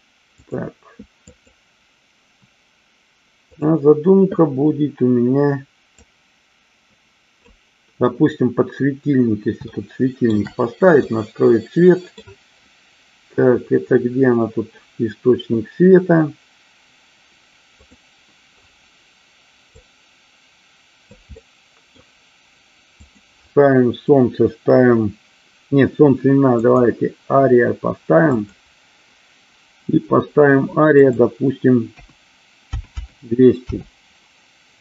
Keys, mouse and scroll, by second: 1.7 click, 6.4-7.7 drag, 10.0 shift+middle click, 11.4-12.4 middle drag, 18.1 click, 20.0-21.4 drag, 21.6 middle click, 23.2-27.1 drag, 28.6 click, 31.2-34.2 drag, 33.1 KP_0.